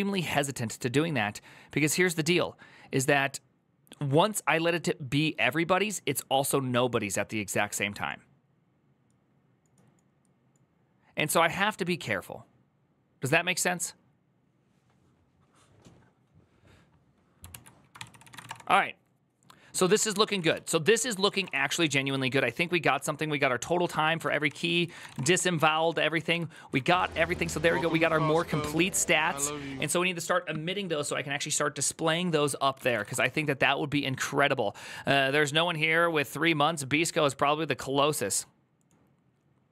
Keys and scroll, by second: 17.4 alt+{, 17.7 ctrl+c, 17.8 ctrl+c, 17.9-18.7 typing, 19.6 ctrl+d, 19.8 ctrl+c, 20.1 ctrl+:, 20.1-27.1 typing, 20.3 ctrl+u, 20.7 ctrl+c, 25.7 ctrl+d, 27.4 ctrl+u, 28.1 ctrl+d, 28.3 ctrl+d, 32.5-33.3 typing.